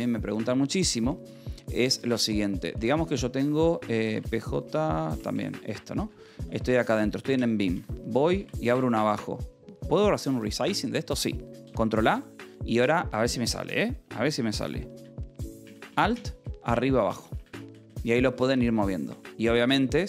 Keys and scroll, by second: 0.1 1, 1.2 0, 1.9 Escape, 2.5-4.0 typing, 5.1 Right, 5.3 Return, 6.0-7.0 typing, 8.3 space, 12.2 ctrl+a, 15.8 alt+Down, 16.1 Up.